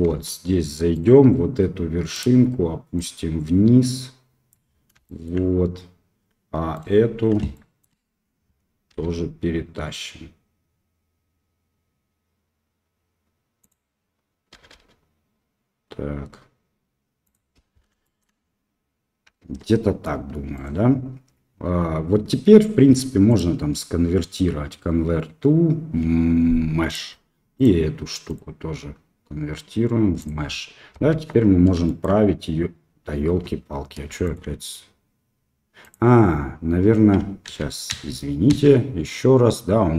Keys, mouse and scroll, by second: 0.0 Tab, 0.9-4.5 drag, 5.0 shift+click, 6.7 click, 7.5 shift+click, 8.9 g, 14.5 g, 18.0 shift+middle click, 19.3 Tab, 20.5 click, 23.5-26.9 drag, 27.5-30.2 drag, 30.6 middle click, 31.1 Tab, 31.5 middle click, 31.8 shift+click, 31.8 shift+middle click, 33.3 Tab, 34.2 shift+middle click, 35.8 click, 37.6 ctrl+z.